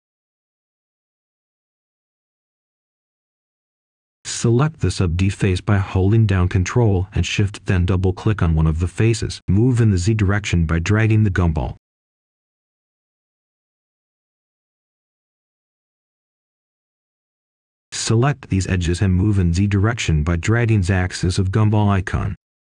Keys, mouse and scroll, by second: 0.1 right click, 1.8 click, 3.7-4.3 scroll up 1, 4.3-5.0 scroll down 1, 5.3 ctrl+shift+click, 6.9 right click, 7.5 ctrl+shift+click, 7.6 right click, 8.7-11.1 drag, 11.1-13.9 right drag, 13.9 click, 14.6-16.3 right drag, 17.3 ctrl+shift+click.